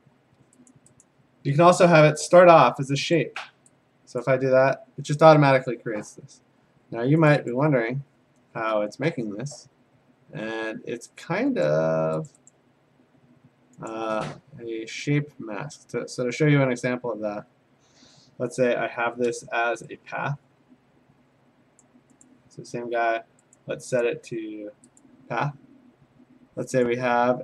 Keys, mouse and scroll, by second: 0.7 click, 1.0 click, 3.2 click, 4.2 click, 7.5 click, 9.2 Escape, 11.7 click, 12.3 click, 12.5 click, 14.0 click, 14.1 Escape, 21.8 click, 22.3 click, 23.6 click, 24.4 click, 25.0 click, 25.4 click.